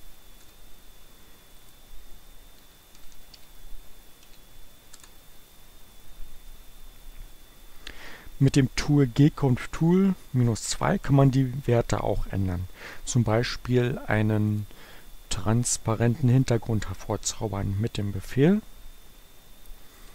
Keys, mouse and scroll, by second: 0.0-0.3 typing, 1.7 click, 2.2-4.2 typing, 14.7 click, 15.5 click, 18.0 g, 19.7-20.1 typing.